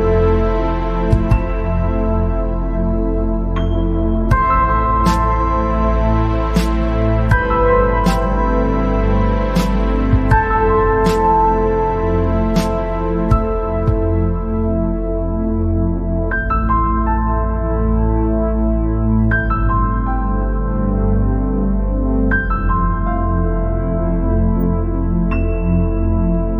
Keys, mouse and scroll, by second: 0.2 scroll down 3, 0.3 middle click, 1.1-2.2 scroll up 6, 2.7 click, 4.4 scroll down 1, 4.6 middle click, 5.5-6.9 scroll up 9, 7.1 click, 13.8-14.1 scroll up 1, 14.1 scroll down 1, 14.2-16.4 middle drag, 16.4 KP_7, 17.8 KP_3, 18.7-19.4 scroll down 8, 19.7-20.1 scroll up 2, 20.8 click, 24.3-24.6 scroll down 5, 25.1 KP_0, 26.3 scroll down 3.